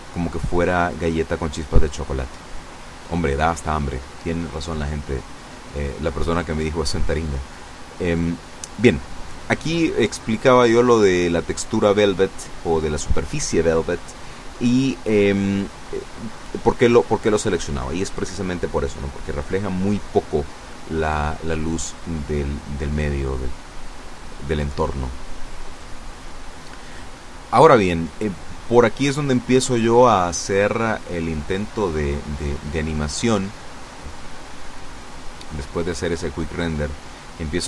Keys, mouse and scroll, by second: 0.8 right click, 1.9 click, 13.5 click, 31.4 F12, 37.4 Escape.